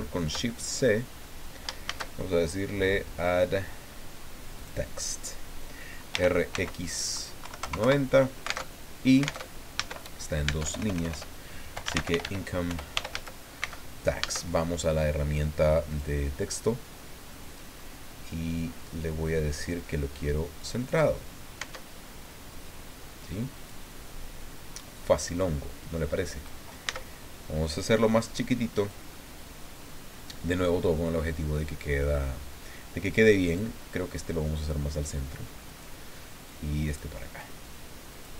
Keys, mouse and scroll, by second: 0.2 shift+scroll up 2, 0.5 shift+click, 1.1-1.4 scroll up 2, 1.8 shift+a, 4.6 click, 6.1 r, 6.5 x, 7.4 KP_9, 7.6 KP_0, 7.8 KP_Enter, 8.6 alt+Tab, 9.4 alt+Tab, 9.8 alt+Caps_Lock, 10.4 Tab, 10.6-13.6 typing, 12.7 Return, 15.9 click, 18.9-19.7 scroll down 2, 20.6 click, 21.6 Tab, 22.5-23.9 drag, 25.4-26.6 drag, 26.8 s, 28.8 click, 29.1 middle click, 30.5-33.3 drag, 33.5 right click, 34.1-35.2 drag, 35.7 right click, 36.5 click, 37.4-38.3 drag.